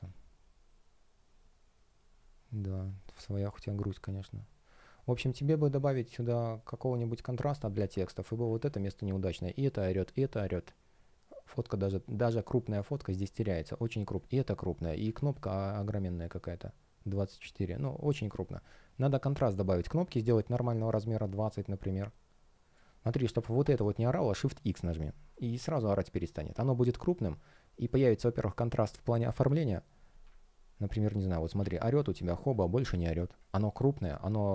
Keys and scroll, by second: 2.9 space, 7.5 space, 10.0 space, 24.0 shift+x, 31.5 shift+x, 33.1 space.